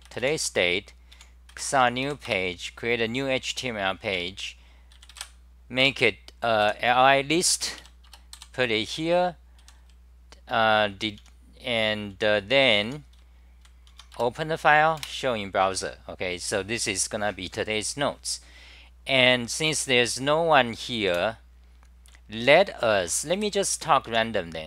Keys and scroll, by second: 2.4 Return, 4.2 Tab, 5.8 Return, 7.3-9.6 typing, 11.2 t, 12.6 s, 13.2-13.6 r, 14.0 Home, 14.2 Return, 15.0 super+r, 21.1 super+w, 22.1-24.2 typing.